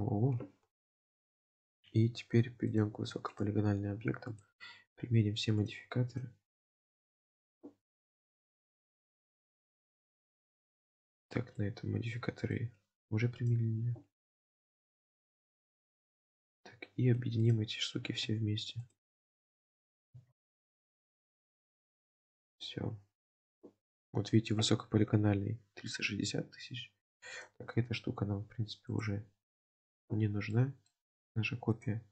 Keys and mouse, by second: 2.7 click, 3.3 click, 4.4 click, 5.7-6.4 drag, 6.9 click, 8.5-9.5 drag, 10.2 click, 11.6-12.7 middle drag, 13.4 click, 15.1-15.9 drag, 17.5 click, 18.9 shift+click, 20.9 click, 21.3-23.4 middle drag, 28.9 click, 29.8 click, 30.6-31.0 middle drag, 31.7 click.